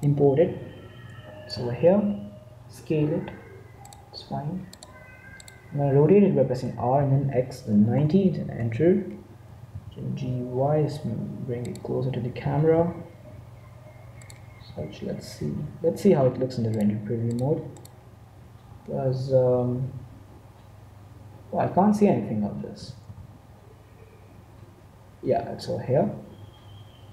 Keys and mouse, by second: 1.4 z, 1.9-4.0 middle drag, 2.8 s, 5.4-6.4 drag, 6.6 r, 9.3 g, 12.3 g, 14.5 g, 17.2-19.0 drag, 22.7 g.